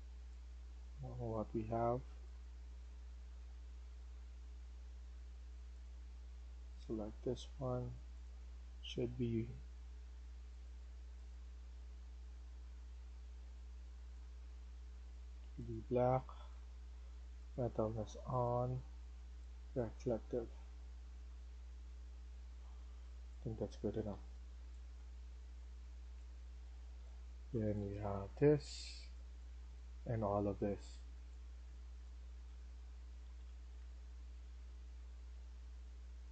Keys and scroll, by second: 1.3-3.7 typing, 9.3 Escape, 10.1 Escape, 23.0-36.3 typing, 27.7 Escape, 27.9 Escape.